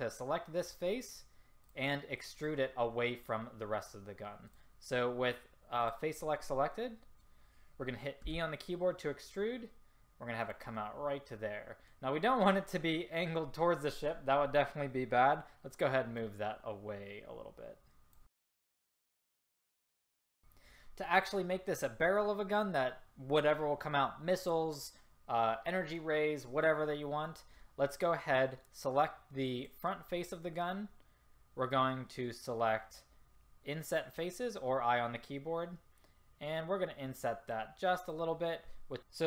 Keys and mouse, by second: 1.7 click, 3.6-5.9 drag, 6.9-8.3 middle drag, 8.3 e, 11.0 middle click, 11.3 middle click, 16.3-18.2 drag, 18.7 click, 19.2 click, 19.3-19.7 middle drag, 19.7-37.1 drag.